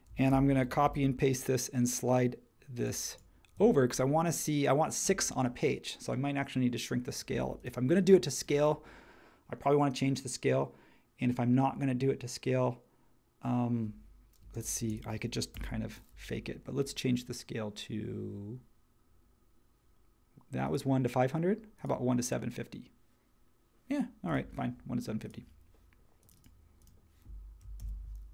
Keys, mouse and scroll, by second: 0.3 super+c, 0.8 super+v, 14.4 space, 15.5 BackSpace, 27.8 super+c.